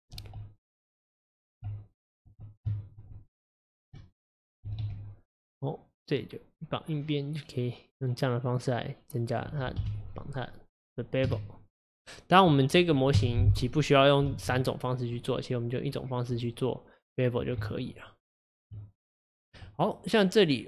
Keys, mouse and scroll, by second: 0.7 alt+click, 0.9 alt+click, 1.4 alt+click, 2.8 shift+click, 3.2 alt+shift+click, 3.6 alt+shift+click, 4.1 alt+click, 4.9 ctrl+z, 6.2-9.2 drag, 9.8 KP_1, 11.3 Tab, 13.2 KP_Divide, 14.3 alt+z, 14.9-15.2 scroll down 3, 15.2-15.9 middle drag, 15.9 scroll up 4, 16.4 click, 17.6 Tab, 19.7 Tab.